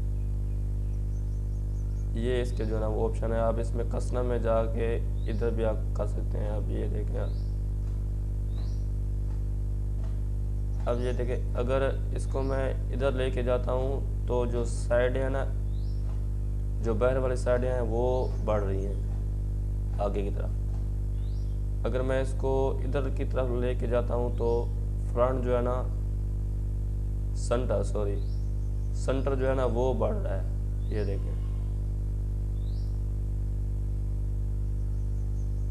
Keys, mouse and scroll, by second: 22.2-27.8 drag, 28.7-35.7 drag.